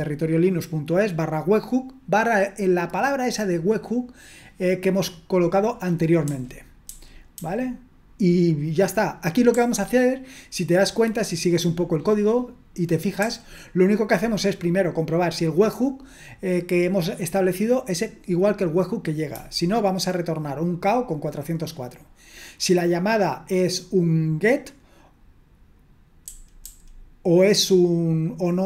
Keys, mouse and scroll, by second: 6.2-7.4 typing, 9.5 k, 13.2 j, 19.3 typing, 26.2-26.6 typing.